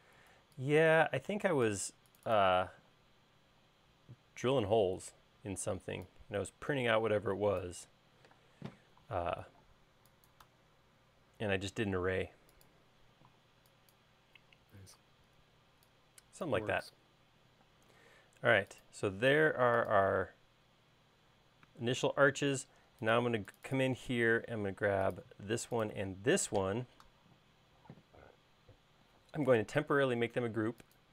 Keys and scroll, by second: 2.9 e, 4.8 space, 8.5 m, 13.3 e, 17.8 space, 19.8 space, 26.8 m.